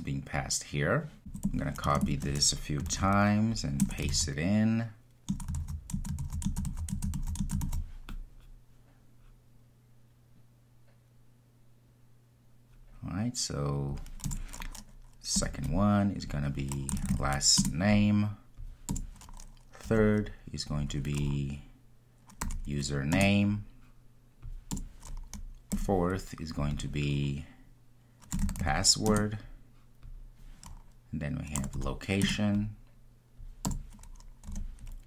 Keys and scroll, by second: 2.9 super+c, 4.0 super+v, 17.6 Return, 23.1 Return, 29.1 Return.